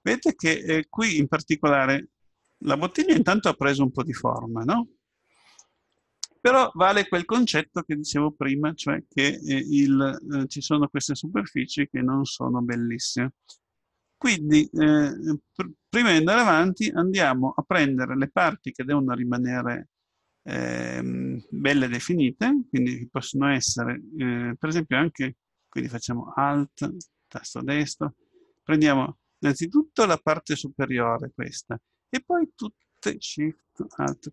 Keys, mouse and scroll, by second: 1.6 middle click, 1.9-3.0 middle drag, 3.0-4.0 scroll down 1, 4.0 scroll down 1, 4.3-5.6 scroll up 1, 5.6 middle click, 6.3-7.0 scroll up 1, 7.0-10.4 middle drag, 10.4-12.0 scroll up 1, 16.3 Tab, 26.8-29.6 right drag, 33.9-34.3 right drag.